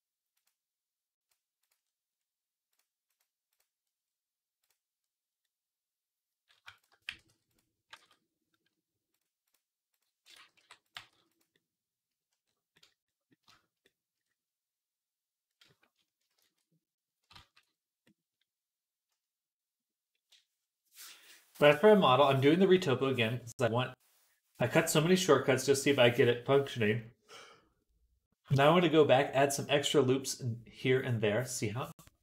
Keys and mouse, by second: 0.3-1.5 drag, 1.5 middle click, 1.9-2.9 middle drag, 2.9-5.1 right drag, 4.5 click, 4.5 middle click, 5.6-32.2 right drag, 6.6 shift+click, 6.9 g, 7.8 ctrl+z, 8.9-10.8 drag, 8.9-10.8 middle drag, 10.2 g, 10.8 g, 16.2 ctrl+z, 17.2 ctrl+z.